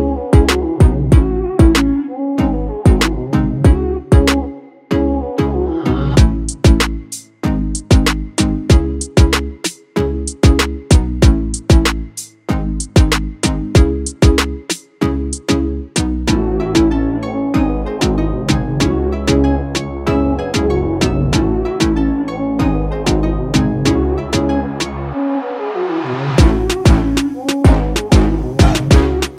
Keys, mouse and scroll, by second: 0.3-0.7 alt+scroll down 1, 0.8 click, 1.2 space, 2.0 space, 2.2 click, 2.5 space, 3.0 click, 3.9 ctrl+click, 4.4 ctrl+space, 4.6 click, 5.0 space, 5.6-10.1 drag, 13.6-15.5 drag, 16.0 alt+scroll down 1, 16.4 space, 16.5 click, 17.0 ctrl+click, 28.3-29.3 drag.